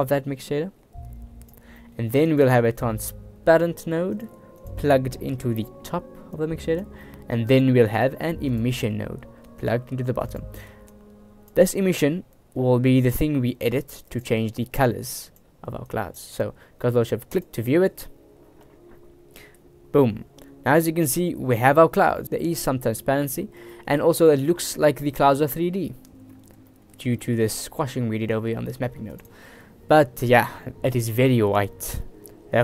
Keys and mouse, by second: 0.7-1.6 drag, 1.9 click, 2.3 shift+a, 5.5 click, 6.5-6.9 drag, 7.4 click, 8.1 click, 8.5 shift+a, 11.1-11.6 drag, 12.0-14.2 drag, 15.2 click, 16.0 click, 20.8 click, 23.8 shift+click, 24.4 shift+click, 25.4 shift+click, 26.8 shift+click, 27.3 shift+click, 28.5 click.